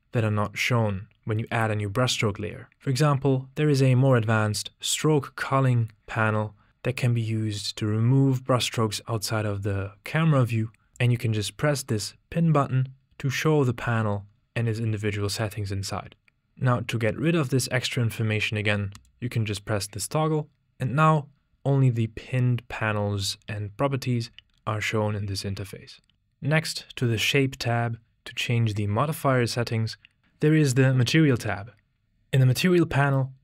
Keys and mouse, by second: 11.4-12.9 drag, 19.2 click, 31.5 click.